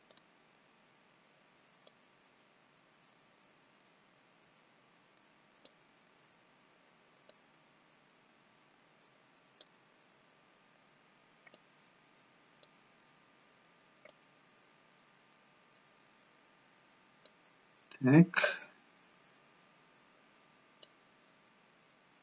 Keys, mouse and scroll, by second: 0.6 middle click, 2.4 click, 5.9 middle click, 7.6 click, 10.0 middle click, 11.8 click, 14.3 click, 17.8 middle click, 21.0 click.